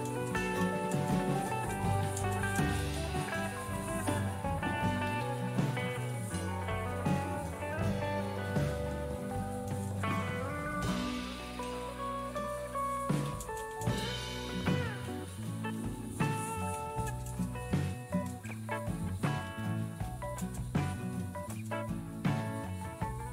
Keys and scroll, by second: 0.0-6.6 typing, 6.9 Return, 7.2 Return, 8.5-9.9 typing, 12.4-21.5 typing.